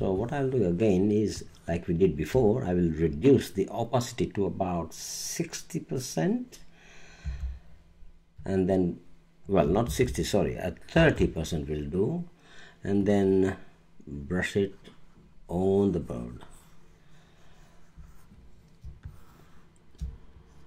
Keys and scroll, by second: 7.2 6, 9.9 super+z, 10.9 super+3, 11.9 3, 18.8 space.